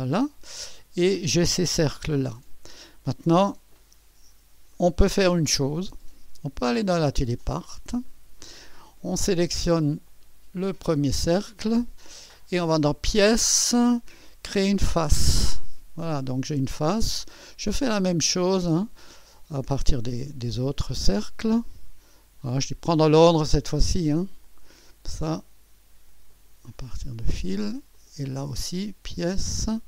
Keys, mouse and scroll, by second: 0.6-2.0 scroll up 1, 2.0 space, 3.2-6.2 drag, 4.1-5.1 scroll up 1, 6.6-8.4 drag, 10.1-11.1 drag, 13.1-14.1 drag, 15.1 click, 17.5 click, 18.6-19.7 drag, 20.5-21.6 drag, 22.1-23.2 scroll down 1, 23.3 click, 24.4-25.4 drag, 26.3-27.4 drag, 27.9-28.9 drag, 29.5 click.